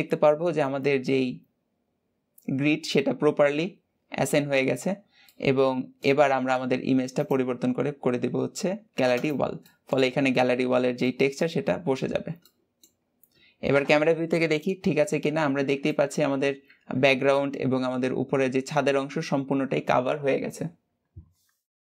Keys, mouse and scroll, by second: 5.1 middle click, 6.0 Tab, 9.0 click, 9.4 middle click, 9.9-10.6 scroll up 10, 10.8 middle click, 11.4-12.0 scroll down 11, 12.2 middle click, 12.8-13.6 scroll up 2, 13.6 KP_0, 15.3 scroll down 2, 15.6-21.9 shift+middle drag.